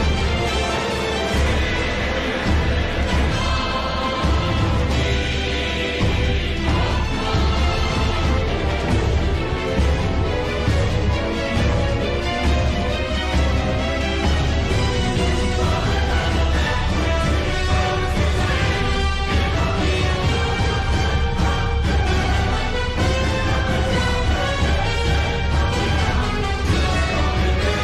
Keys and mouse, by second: 6.1 click, 13.2 click, 14.7 click, 19.9 middle click, 21.9 middle click, 24.9 click, 27.7-27.8 drag.